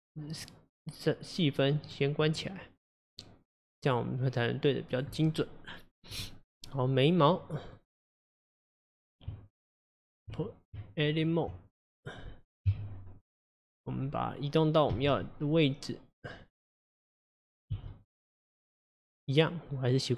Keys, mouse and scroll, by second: 0.4 click, 1.9 click, 2.3 click, 3.9-6.7 drag, 6.7-8.8 middle drag, 8.8 click, 9.3 Tab, 10.8 Tab, 12.8 KP_3, 13.5-15.0 scroll up 3, 15.0 g, 17.1 click, 17.8 g.